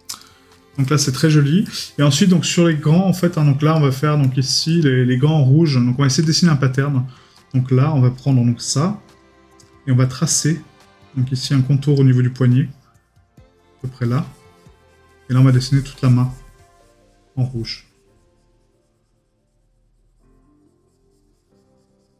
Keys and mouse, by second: 0.2 right click, 1.1 middle click, 3.2 right click, 7.4 right click.